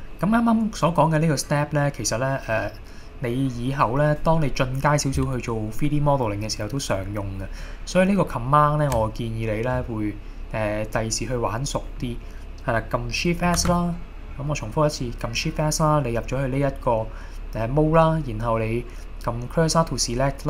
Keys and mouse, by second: 1.7-2.1 middle drag, 2.2 middle click, 7.1-7.6 middle drag, 9.3-9.7 shift+middle drag, 10.1-12.2 middle drag, 13.6 shift+s.